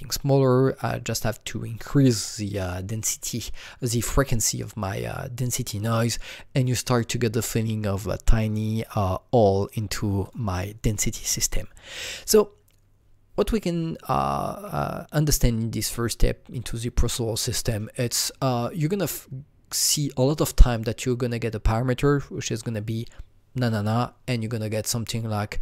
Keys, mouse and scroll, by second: 0.8 click, 2.1 KP_0, 2.9 click, 4.5 click, 6.6 click, 9.5 click, 14.1 click.